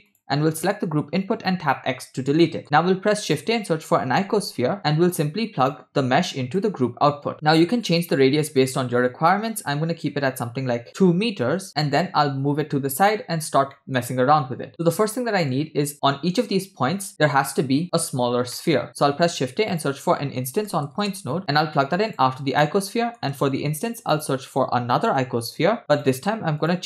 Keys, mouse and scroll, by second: 0.1 click, 1.6 x, 2.4 middle click, 2.6 shift+a, 6.6-7.3 drag, 8.6-11.5 drag, 12.0-13.1 drag, 13.4-13.7 scroll down 2, 13.7 middle click, 14.7-15.6 middle drag, 15.6 scroll up 1, 18.6 middle click, 18.7-19.1 scroll up 2, 19.1 shift+a, 23.0 middle click, 23.4 shift+a.